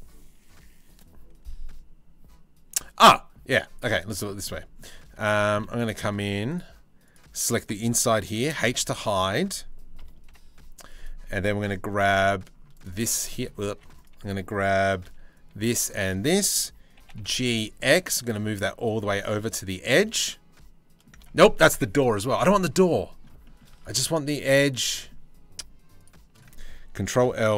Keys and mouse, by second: 2.6 middle click, 3.1 3, 3.5 z, 3.9 middle click, 4.7 z, 8.1 h, 8.3 click, 9.6 KP_3, 9.9 KP_1, 10.5 click, 11.6 c, 13.3 1, 14.6 c, 16.6 g, 18.5 z, 20.9 ctrl+z, 23.3 z, 26.7 ctrl+l, 27.2 h.